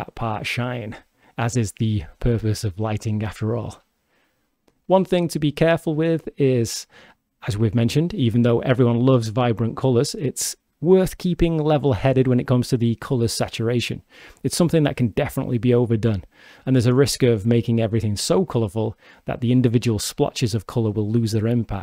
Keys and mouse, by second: 2.7 g, 3.9 click, 6.6-8.3 drag, 8.3 g, 8.4 click, 12.4 shift+d, 15.1 click, 15.6 shift+d, 18.4 click, 18.9 shift+d, 20.8 click, 21.5-21.8 drag.